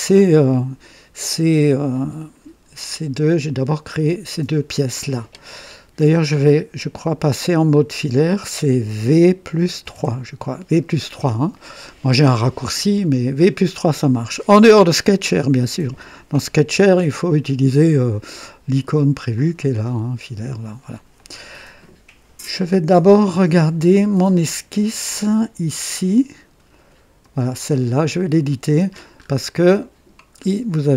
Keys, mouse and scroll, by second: 6.8 click, 9.7 typing, 19.2 click, 20.3 click, 21.1 click, 23.3 click, 27.1 click, 28.0 click, 29.1 scroll up 2, 29.5-30.2 right drag, 30.3-30.8 scroll up 2, 30.8-30.9 right drag.